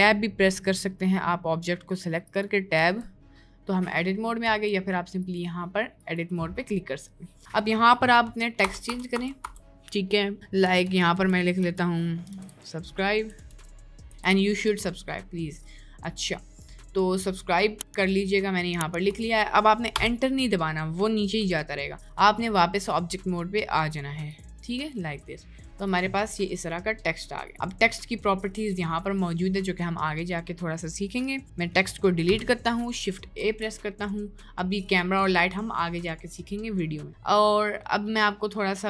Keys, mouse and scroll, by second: 2.8 b, 4.5 b, 8.6 BackSpace, 8.8 BackSpace, 9.1 BackSpace, 9.4 BackSpace, 14.6 b, 20.0 Return, 21.4 BackSpace, 32.3 Delete, 33.4 shift+a.